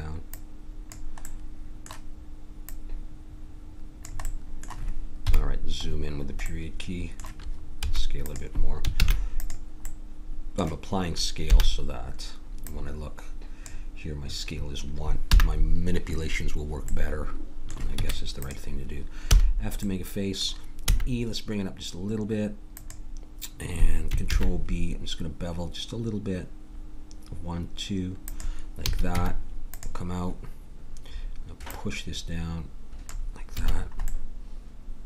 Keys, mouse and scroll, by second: 1.3-3.2 middle drag, 2.7 click, 3.2-4.2 drag, 4.2 middle click, 5.2 KP_Decimal, 7.8 s, 9.0 ctrl+a, 11.4 n, 15.0 n, 17.9 Tab, 19.2 f, 20.8 e, 24.3 ctrl+b, 28.9 a, 29.1 Tab, 31.6 click, 33.6 a.